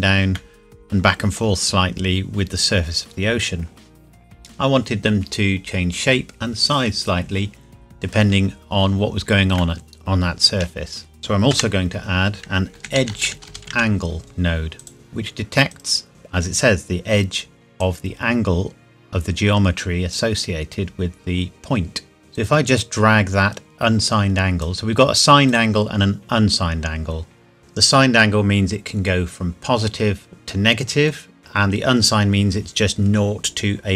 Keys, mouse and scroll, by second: 0.3 middle click, 2.0 scroll down 1, 9.5 shift+Num_Lock, 9.5 scroll down 1, 9.8 shift+middle click, 10.9 scroll down 1, 11.2 click, 11.5 F3, 12.9-13.8 typing, 14.8 click, 17.8 click.